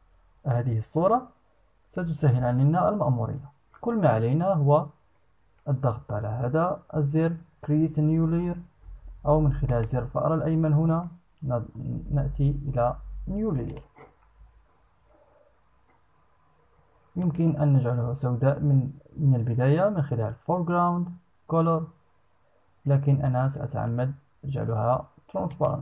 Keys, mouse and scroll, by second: 9.2 right click, 13.2 click, 16.7 click, 25.0 click.